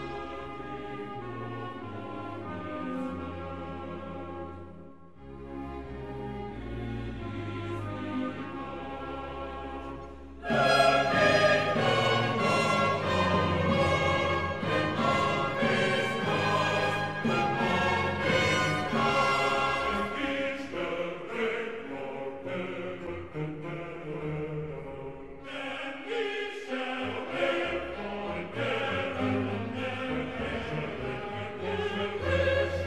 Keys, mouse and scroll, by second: 14.3 click, 14.3 click, 18.5-19.2 typing, 30.0 click, 31.7-32.8 middle drag.